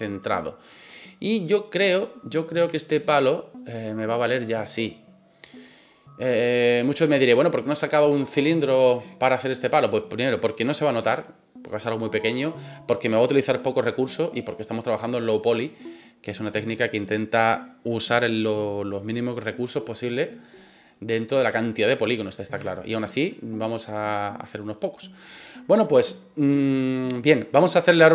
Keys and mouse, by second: 0.2-0.8 middle drag, 2.0 middle drag, 2.7 shift+middle drag, 3.5 click, 5.4 right click, 5.6-6.6 middle drag, 20.9 middle click, 22.6 shift+middle drag, 24.0 right click, 25.9-26.5 middle drag.